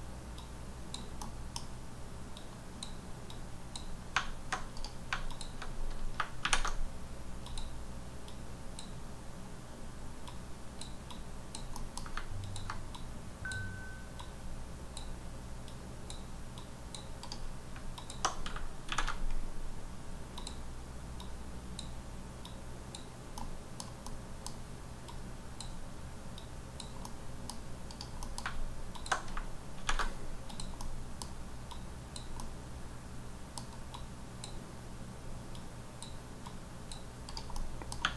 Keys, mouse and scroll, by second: 0.3 click, 1.2 middle click, 2.3 click, 3.3 click, 4.8 right click, 5.2 alt+click, 5.7-6.1 scroll down 2, 6.9-7.4 scroll down 1, 7.4 click, 8.2 click, 10.2 click, 11.1 click, 11.7 middle click, 12.4 ctrl+click, 14.2 click, 15.7 click, 16.5 click, 17.2 right click, 18.0 alt+click, 20.3 click, 21.5 click, 22.7 click, 23.3 middle click, 24.3 middle click, 25.0 click, 26.3 click, 27.0 middle click, 27.9 right click, 28.2 middle click, 28.9 alt+click, 30.5 click, 30.8 middle click, 31.7 click, 32.3 middle click, 33.9 click, 35.5 click, 36.4 click, 37.5 middle click.